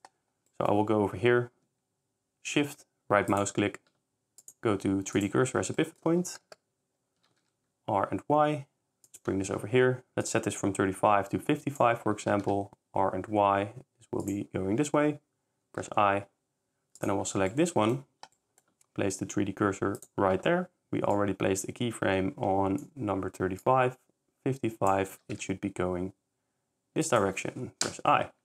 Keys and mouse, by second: 0.5 middle click, 1.6 s, 3.3 click, 4.4-5.3 drag, 5.8 middle click, 7.2 r, 7.4 y, 10.3 click, 12.2 r, 12.5 y, 15.8 i, 17.0 click, 17.5 middle drag, 18.3 s, 19.3 s, 20.0 click, 21.2 click, 23.6 click, 25.2 r, 25.4 y, 27.8 i.